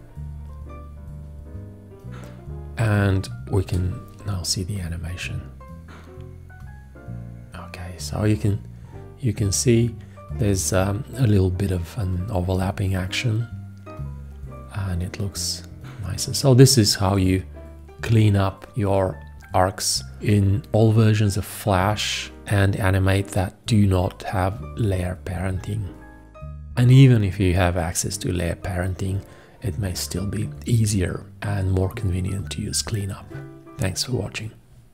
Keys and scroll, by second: 3.6 Return.